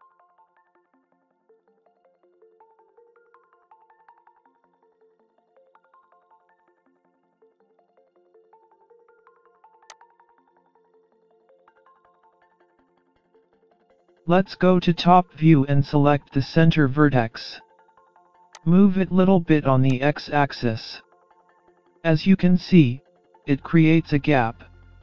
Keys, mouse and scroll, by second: 9.9 click, 14.3 Tab, 15.1-15.9 scroll up 2, 17.1-17.5 scroll up 1, 18.6 click, 19.9 click, 24.3-24.8 scroll up 3, 24.8 middle click.